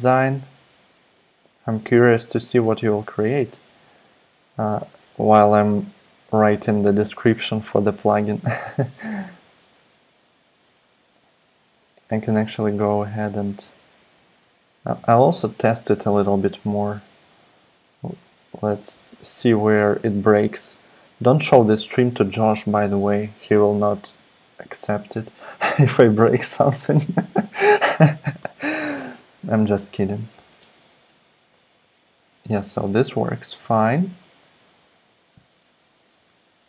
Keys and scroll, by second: 4.8 super+Tab, 13.0 super+Tab, 14.0 super+Tab, 30.3 alt+super+p, 30.9 alt+super+p, 33.6 super+z.